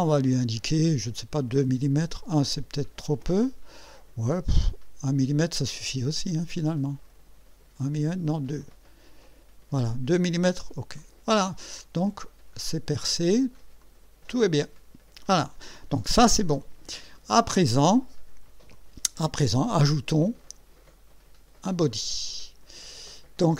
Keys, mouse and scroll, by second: 0.0 scroll down 1, 1.9 scroll down 1, 4.4 scroll up 2, 4.7 scroll down 2, 7.1 scroll down 2, 8.3 scroll up 2, 11.0 click, 11.8-13.5 drag, 13.8-15.8 drag, 18.7 click, 21.9 click.